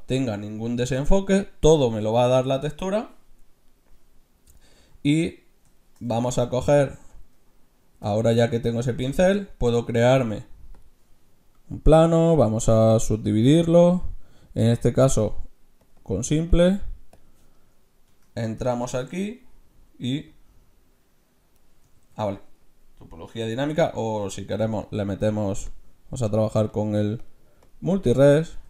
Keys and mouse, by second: 6.9 Tab, 8.1 x, 9.2 shift+a, 12.3-14.8 drag, 15.1-18.9 drag, 18.1 Tab, 18.9 middle click, 19.1 middle click, 20.3-22.0 drag, 22.0 ctrl+z, 24.1 Tab, 24.8-26.5 drag, 26.7-28.6 drag.